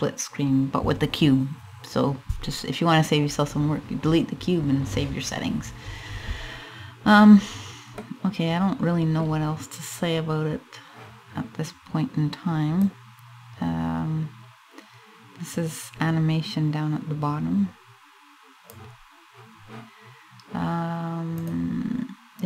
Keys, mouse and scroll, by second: 7.0-7.6 scroll down 3, 7.2-7.6 scroll up 1, 7.6 middle click, 12.4 click, 22.2 click.